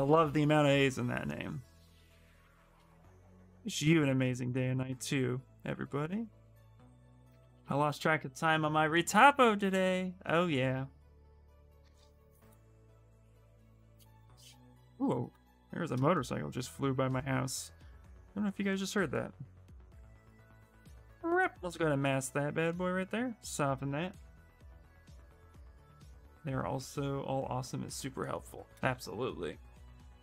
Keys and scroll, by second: 29.2 w.